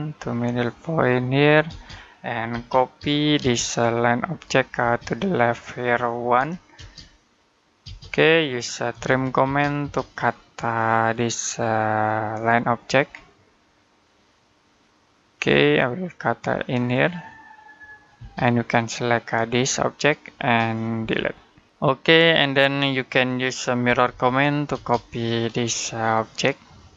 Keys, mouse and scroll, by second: 1.5-3.2 typing, 4.2 click, 4.6 space, 4.8 click, 6.2 1, 6.6 space, 8.8-9.3 typing, 10.1-11.5 scroll up 1, 12.2 click, 12.9-15.1 scroll up 1, 15.2 click, 18.0 space, 18.4 click, 20.8 Delete, 21.4-22.2 scroll down 1, 22.5 middle click, 23.7-24.6 typing, 25.0-25.5 scroll up 1, 25.5 click.